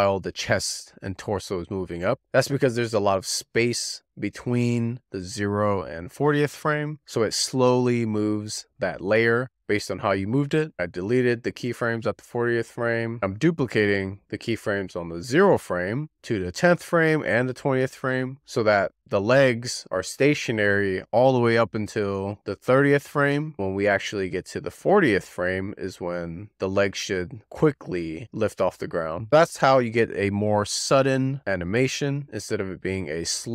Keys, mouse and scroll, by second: 1.1-11.0 drag, 11.1 z, 12.8 z, 13.2 d, 13.8 shift+d, 17.5 shift+d, 20.8 shift+d, 23.7-28.0 drag, 30.0-33.5 drag.